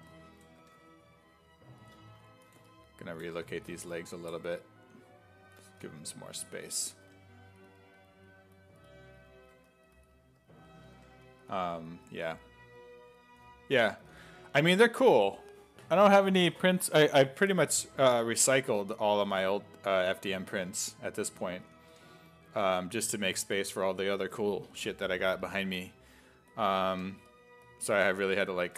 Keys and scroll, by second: 0.6 1, 3.4 1, 4.4 1, 5.7 s, 6.0 1, 6.8 s, 7.1 1, 9.5 1, 10.9 1, 14.0 s, 19.1 s, 20.0 1, 21.6 s, 21.9 1, 23.4 1, 25.8 1, 27.1 1.